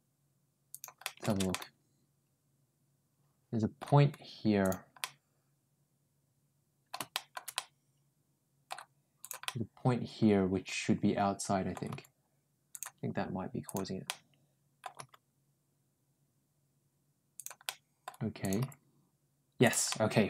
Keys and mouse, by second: 0.9 middle click, 1.3-3.6 middle drag, 4.5 ctrl+click, 4.8-6.7 ctrl+middle drag, 7.0 shift+middle click, 7.4-8.5 middle drag, 9.0 click, 9.3-11.6 middle drag, 11.7 g, 13.5 click, 13.9 middle click, 14.8 g, 17.5 middle click, 18.3 click, 18.4 g, 19.7 middle click.